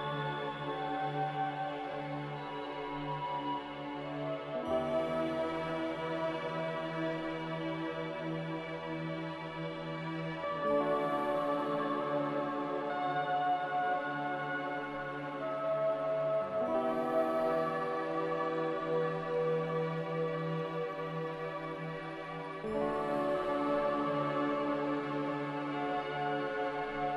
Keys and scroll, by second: 10.3 Delete, 18.1 a, 19.3 ctrl+c, 19.5 ctrl+v.